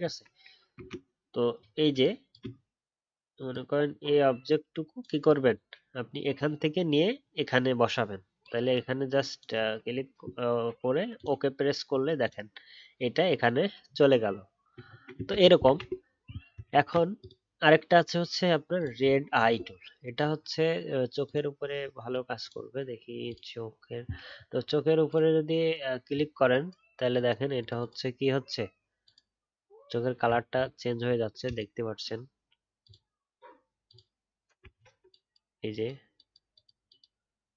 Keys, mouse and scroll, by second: 0.0 ctrl+z, 0.7 ctrl+d, 14.8-15.1 alt+scroll down 1, 15.1-15.6 ctrl+scroll up 2, 15.3 ctrl+z, 15.6 ctrl+z, 16.7 ctrl+d, 24.3-24.6 alt+scroll up 1, 26.0-27.6 alt+scroll up 1, 30.2 alt+scroll down 1, 31.0-31.3 alt+scroll up 1, 34.7-37.5 alt+scroll up 2.